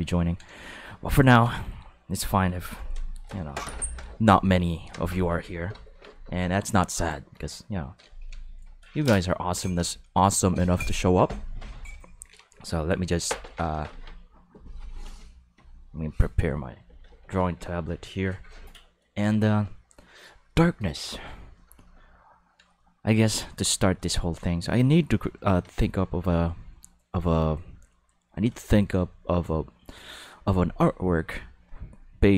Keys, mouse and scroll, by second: 23.8 click, 26.1-28.7 drag, 29.9 click.